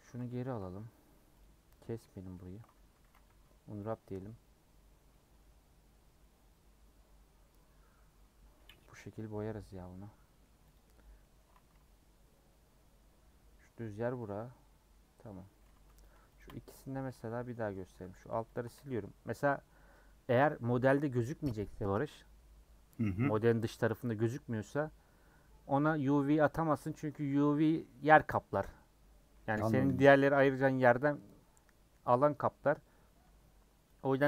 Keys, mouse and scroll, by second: 0.2 ctrl+z, 1.4 Left, 2.0 ctrl+z, 2.2 ctrl+z, 3.0 a, 3.9 u, 5.1-8.2 middle drag, 8.2-9.3 scroll down 2, 9.3-10.7 middle drag, 10.7 click, 11.1 scroll down 1, 11.2 middle click, 11.5 a, 14.2-15.7 middle drag, 15.7 Tab, 16.0 click, 17.0 /, 17.5 middle click, 17.8 Tab, 18.0 3, 18.2 click, 29.9 x, 30.9-34.2 middle drag.